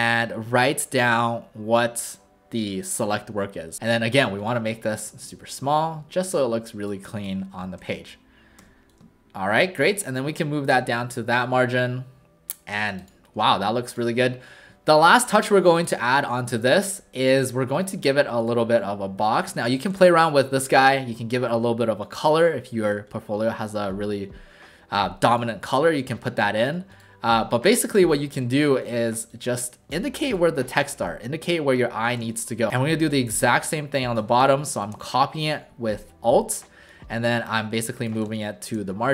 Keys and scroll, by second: 3.7 ctrl+a, 3.7 typing, 7.8 w, 8.6 w, 10.7 shift+w, 16.7 w, 19.5 alt+space, 30.8 w, 32.2 space, 34.4 alt+shift+space, 38.2 shift+space.